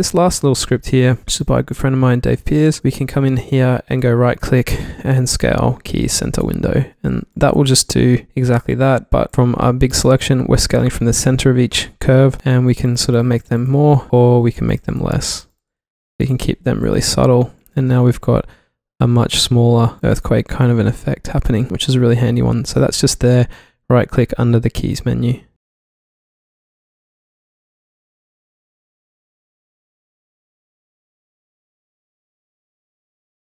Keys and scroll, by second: 0.4 super+z, 0.9 super+z, 1.9 q, 17.4 v, 18.0 alt+v, 19.3 alt+v, 20.5 v, 22.2 alt+v.